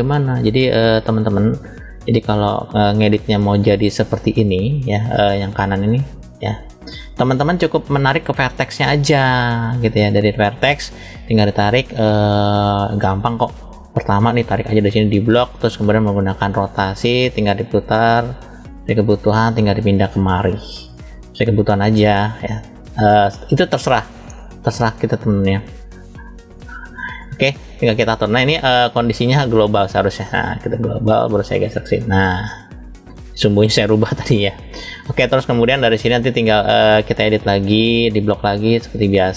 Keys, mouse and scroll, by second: 0.3 KP_1, 1.4 KP_3, 2.5 shift+middle click, 8.2 click, 9.0-9.8 scroll up 1, 9.8 click, 12.3 shift+middle click, 14.5 click, 16.4 click, 17.4 click, 19.3 click, 21.2 click, 25.5 click, 28.5-30.1 drag, 31.0 click, 36.7 click, 37.6 click.